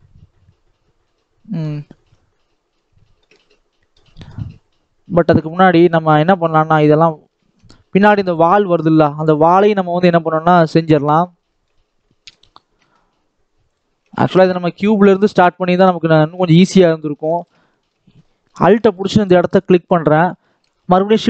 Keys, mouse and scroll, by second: 0.9 middle click, 1.8 scroll up 2, 2.0 scroll down 1, 2.2-5.3 middle drag, 5.3 click, 5.7 scroll down 1, 5.9 middle click, 6.6 click, 7.3 ctrl+s, 8.1 Tab, 8.6 Tab, 10.9-11.3 scroll up 2, 11.3 shift+middle click, 11.7 Tab, 11.9 middle click, 12.3-12.7 scroll up 2, 12.7 alt+a, 13.5 click, 13.9 alt+a, 14.1 middle click, 14.9-16.1 alt+shift+drag, 16.1 alt+a, 16.7-17.3 scroll up 1, 17.3 alt+shift+click, 17.5 shift+middle click, 17.9 scroll up 2, 18.2 shift+middle click, 18.5 alt+a, 19.5 alt+click.